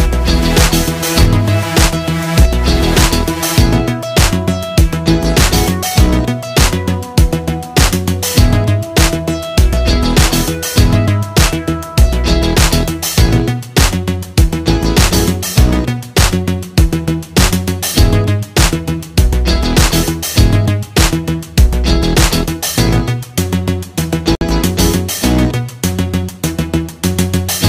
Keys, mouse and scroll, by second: 9.0 click, 12.4 click, 18.5-19.5 ctrl+scroll up 1, 20.9 alt+scroll up 1, 23.1 alt+Num_Lock, 23.3 alt+scroll up 1, 27.0 click.